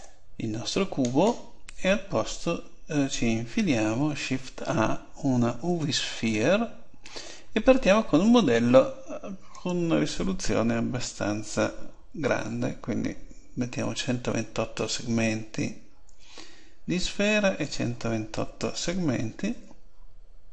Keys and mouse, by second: 1.0-2.6 right drag, 3.8 shift+a, 9.5-11.4 drag.